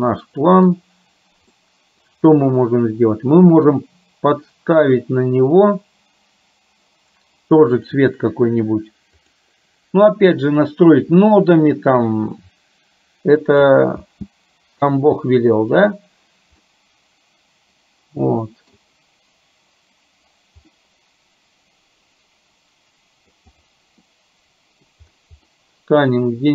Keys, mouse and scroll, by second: 1.7 middle click, 7.8 click, 9.2 click, 14.3 space, 16.6-18.8 middle drag, 20.8-23.4 middle drag, 24.1 middle click, 25.6-26.5 middle drag.